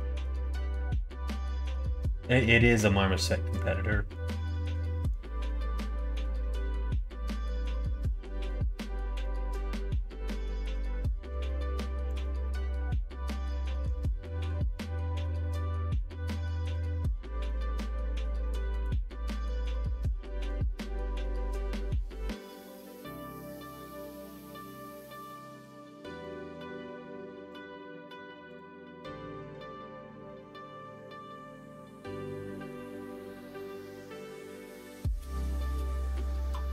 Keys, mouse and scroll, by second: 12.1-20.9 drag, 21.7 middle click, 26.3 click, 27.5 click, 28.5 click.